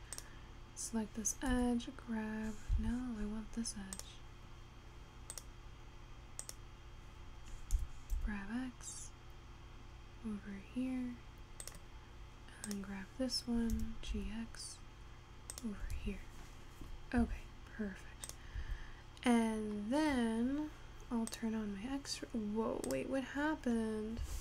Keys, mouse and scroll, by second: 0.2 click, 1.6 g, 3.4-4.1 scroll up 3, 4.1 click, 5.0-5.4 scroll down 2, 5.4 click, 6.6 click, 7.8 g, 12.7 click, 13.8 g, 16.0 Tab, 16.4-17.2 scroll down 3, 17.2 scroll up 3, 17.3 Tab, 18.4 click, 18.7 Tab, 19.3-20.4 scroll down 6, 20.8-21.8 scroll up 2, 21.8 click, 22.0-22.5 scroll up 4, 24.0-24.4 scroll down 4.